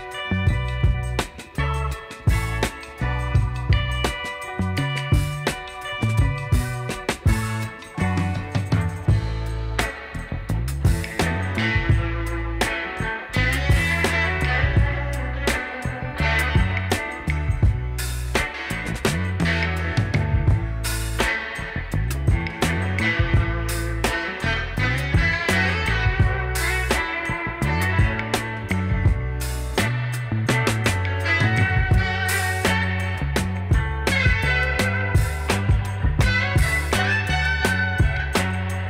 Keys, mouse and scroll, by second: 0.6-1.1 alt+scroll up 1, 1.7 shift+click, 2.2 shift+click, 4.1 typing, 4.4 Return, 5.1 alt+scroll down 1, 5.3 alt+middle click, 5.7-6.2 alt+scroll up 1, 6.9-7.2 alt+scroll up 1, 8.0 alt+scroll up 1, 9.4-9.9 alt+scroll down 1, 9.9 alt+middle click, 11.9 shift+click, 12.9 shift+click, 13.6 shift+click, 15.6 typing, 15.7 Return, 16.3 alt+scroll down 1, 16.4 alt+middle click, 17.0 alt+middle click, 17.3 alt+scroll up 1, 18.1 shift+click, 20.1 shift+click, 20.6 shift+click, 21.9 5, 22.0 Return, 22.6 alt+scroll down 1, 23.6 alt+scroll down 1, 29.2 alt+scroll up 1, 29.4 alt+middle click, 35.7 double click, 36.0-36.6 alt+scroll down 2, 36.6 alt+middle click, 37.0-37.8 alt+scroll up 1, 38.1 shift+click.